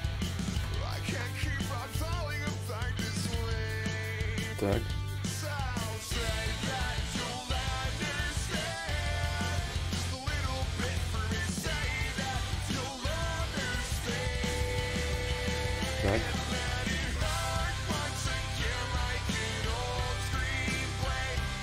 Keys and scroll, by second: 0.0 ctrl+z, 0.6 ctrl+z, 0.6 y, 20.9 s.